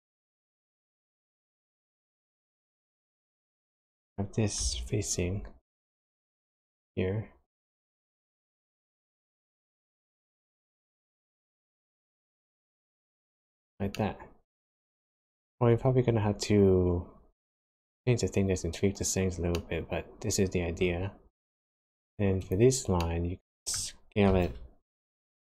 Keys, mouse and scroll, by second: 4.5 g, 7.7 middle click, 10.7 s, 12.6 click, 13.4 click, 13.9 middle click, 19.5 middle click, 22.0 click, 22.4 click, 23.0 middle click, 24.2 s.